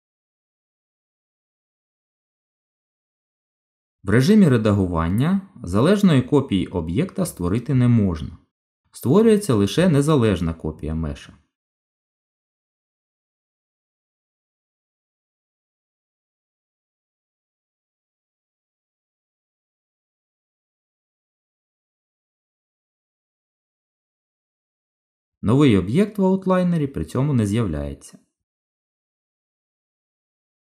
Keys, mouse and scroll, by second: 0.0 Delete, 0.8 shift+a, 2.6 scroll up 1, 2.8 middle click, 4.5 Tab, 8.8 click, 18.9 shift+d, 27.9 click, 29.4 g.